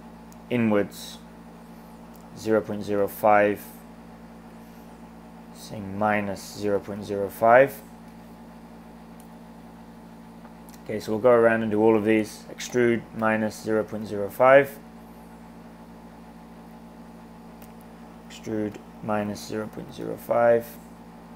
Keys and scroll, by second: 2.0-3.4 typing, 5.9-7.8 typing, 12.4-14.8 typing, 17.7-20.3 typing.